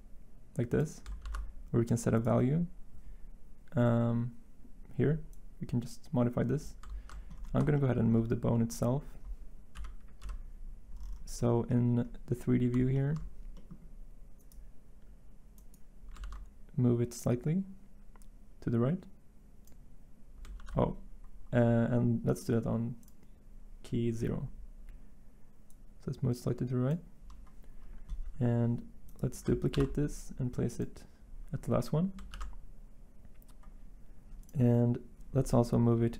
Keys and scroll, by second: 1.2 ctrl+z, 6.9 ctrl+z, 7.0 ctrl+z, 9.7 Delete, 16.2 ctrl+z, 20.5 ctrl+z, 29.7 ctrl+c, 32.3 ctrl+v.